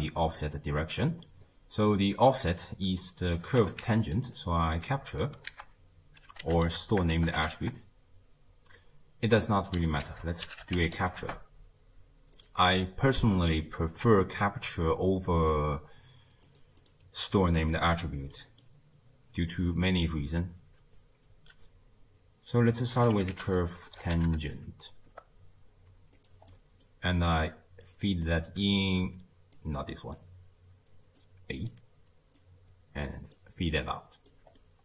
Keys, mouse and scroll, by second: 1.5-1.9 scroll down 1, 1.9-3.0 middle drag, 3.0 click, 3.6 g, 4.2 click, 4.8 click, 5.5 ctrl+a, 12.7-13.7 scroll up 3, 13.7-15.4 middle drag, 15.4-16.6 drag, 16.8-18.3 drag, 18.3-19.5 middle drag, 19.5 drag, 26.5-27.8 middle drag, 27.8-29.6 alt+right drag, 29.6-31.4 drag, 32.4 click, 33.8 click, 34.6-34.8 middle drag.